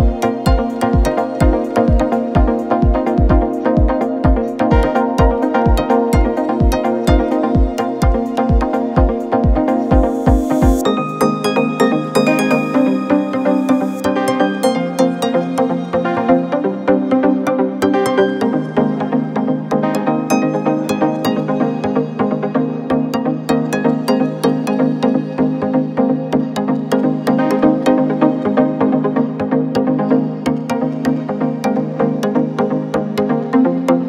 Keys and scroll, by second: 3.9 ctrl+j, 8.1 ctrl+t, 15.8 Return, 18.4 ctrl+shift+], 22.0 ctrl+t, 32.6 Return.